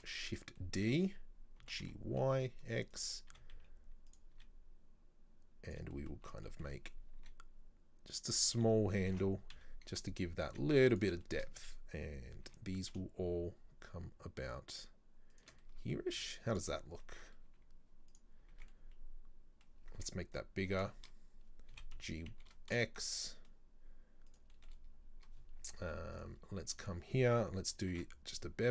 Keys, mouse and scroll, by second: 0.6-1.6 middle drag, 1.6 g, 4.4 s, 6.0 middle click, 6.3-7.3 scroll up 4, 6.5 shift+middle click, 7.3 e, 9.1 ctrl+l, 9.6 KP_3, 10.5 z, 11.3 shift+middle click, 11.6-12.5 scroll up 2, 12.5 g, 15.7 middle click, 16.0 scroll down 1, 16.2 z, 16.8 scroll down 2, 17.0 middle click, 17.5 z, 18.4 scroll down 1, 18.6 Tab, 18.8-19.9 middle drag, 19.9 scroll up 2, 20.0 Tab, 20.4 right click, 20.9 shift+middle click, 21.8 g, 24.6 shift+middle click, 24.9-25.5 scroll up 2, 26.2 click, 26.8 right click, 27.9 ctrl+b.